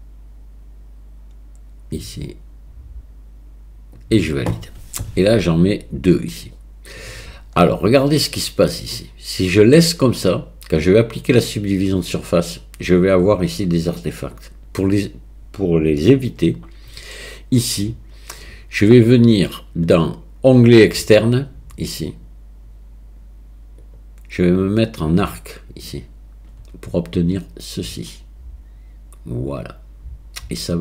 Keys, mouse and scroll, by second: 6.6-8.8 drag, 8.8 middle click, 23.9-26.0 middle drag.